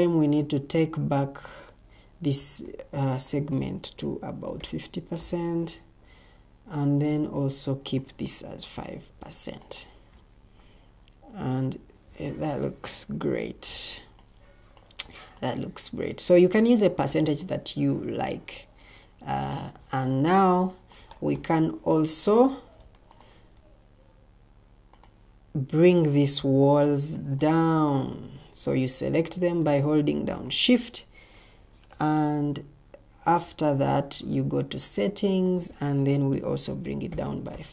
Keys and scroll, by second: 4.2-5.0 typing, 8.7 5, 12.2 Escape, 13.2 o, 22.2 Escape, 27.1 o, 28.1 Escape, 28.9 Escape, 31.6 ctrl+t, 36.0-37.5 typing.